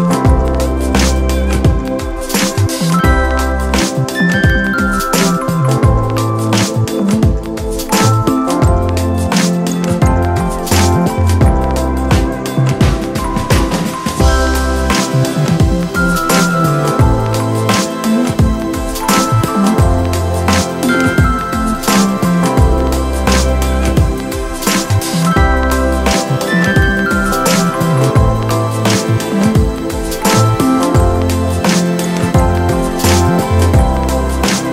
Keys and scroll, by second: 24.8 space.